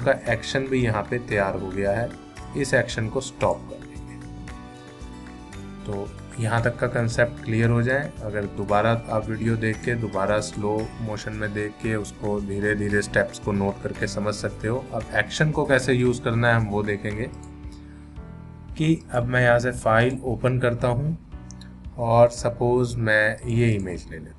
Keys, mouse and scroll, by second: 3.4 click, 8.2-10.1 click, 17.3 click, 23.4 click.